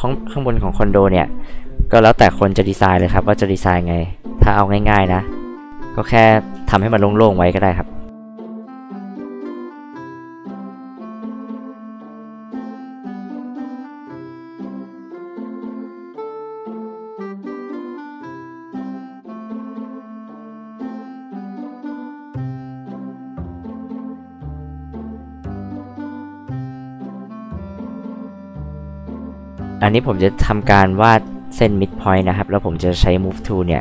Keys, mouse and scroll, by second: 2.3 f, 4.0-5.6 drag, 5.9 scroll up 2, 6.1 scroll down 2, 6.7 ctrl+z, 7.1 click, 7.4 scroll up 2, 10.2 ctrl+z, 10.5 ctrl+z, 11.1 e, 11.2 click, 11.9 click, 13.6 click, 14.7 h, 14.8 click, 19.6 click, 20.7 h, 20.8 click, 21.1 click, 21.3 click, 22.0 click, 22.6 click, 23.0 click, 24.2 click, 24.8 click, 25.2 l, 26.3 click, 27.0 m, 27.4-28.1 drag, 28.4 middle click, 28.5 middle click, 29.0 middle click, 31.0 scroll up 2, 31.1-31.5 scroll down 2, 32.0 scroll up 2, 33.2-33.8 drag.